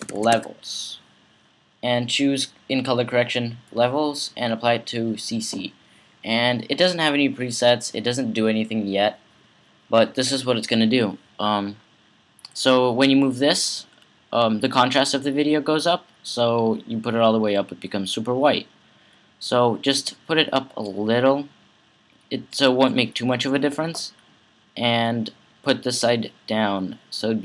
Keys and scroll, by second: 0.0-0.6 typing.